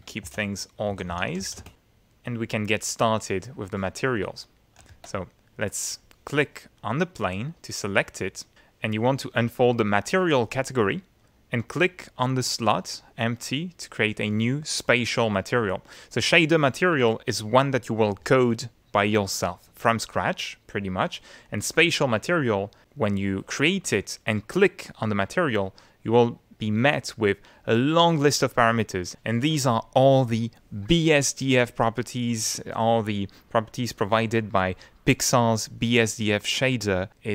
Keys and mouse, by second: 0.2-1.9 typing, 2.1 middle click, 2.8 middle click, 4.2 click, 4.9 ctrl+z, 6.8 click, 10.1 click, 12.9 click, 21.6 click, 24.3 click.